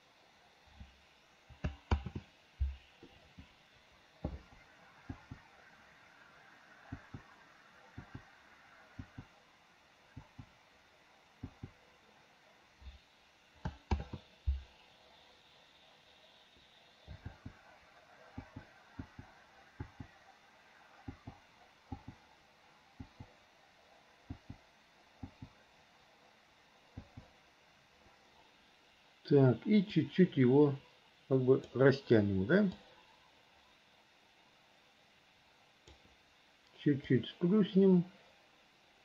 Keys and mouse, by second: 2.1 ctrl+z, 5.3 click, 7.1 click, 8.2 click, 9.2 click, 10.4 click, 11.6 click, 14.1 ctrl+z, 17.5 l, 18.6 l, 19.2 l, 20.0 l, 21.3 l, 22.1 l, 24.5 l, 25.4 l, 27.2 l, 30.0 click, 30.4-31.8 drag, 33.1-36.1 drag, 37.2 click, 37.5-39.0 drag.